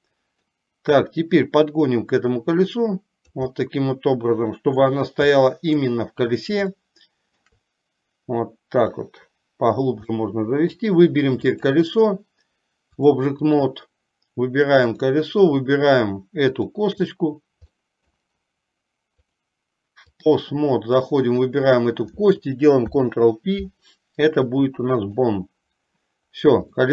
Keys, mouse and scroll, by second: 1.9-3.5 drag, 3.5 scroll up 1, 3.8-5.0 middle drag, 5.0 scroll down 1, 5.5 middle click, 7.0 shift+middle click, 7.5 shift+scroll down 1, 8.9-10.0 drag, 10.2-11.2 middle drag, 11.7 click, 13.2 click, 14.9 click, 16.5 shift+click, 17.9 middle click, 19.3-20.4 drag, 21.4 click, 22.9 ctrl+p.